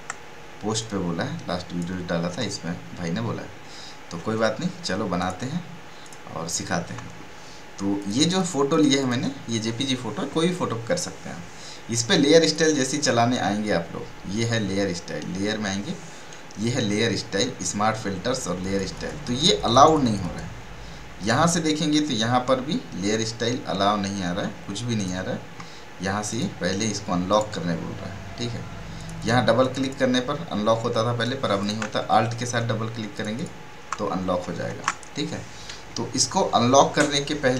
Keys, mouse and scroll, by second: 0.8-2.5 drag, 2.5 ctrl+scroll down 1, 3.1 ctrl+scroll down 1, 4.2 ctrl+n, 5.2 click, 12.4 click, 18.6 click, 20.3 click, 21.2 right click, 24.9 right click, 27.3 right click, 28.9 right click, 30.4 click, 33.1 click, 34.7 ctrl+alt+z.